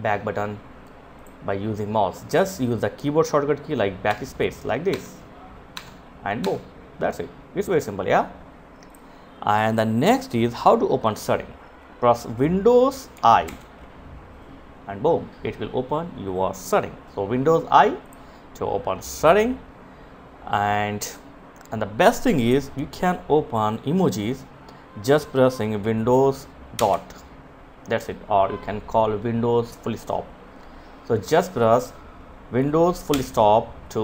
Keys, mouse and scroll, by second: 3.0 BackSpace, 7.9 click, 12.4 super+i, 16.9 click, 30.5 click.